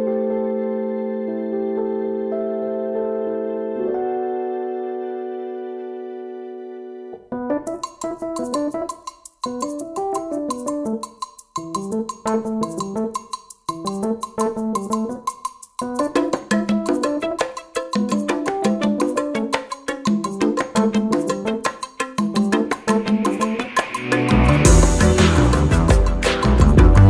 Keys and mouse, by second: 3.3 click, 5.4 right click, 5.7-6.6 drag, 13.4 right click, 15.1 click, 17.2 click, 20.8-24.4 drag, 26.7 click.